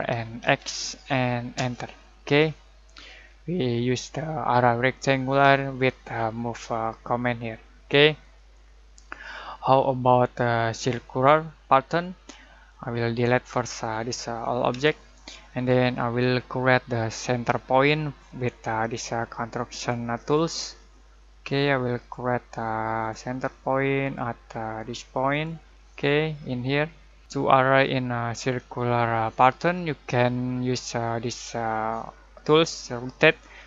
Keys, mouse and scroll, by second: 0.2-0.9 typing, 1.5 Return, 3.2-3.9 scroll down 1, 4.8 scroll down 1, 8.2 click, 11.8 click, 12.1-14.7 drag, 14.7 Delete, 20.1 Delete, 20.4 click, 22.0 click.